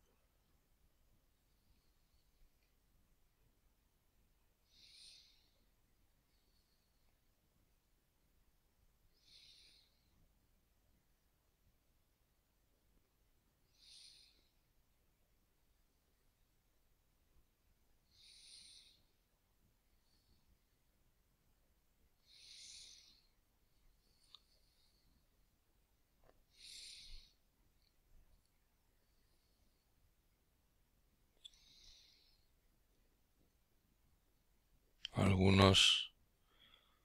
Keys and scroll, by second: 27.5-32.1 typing, 33.5-37.0 typing.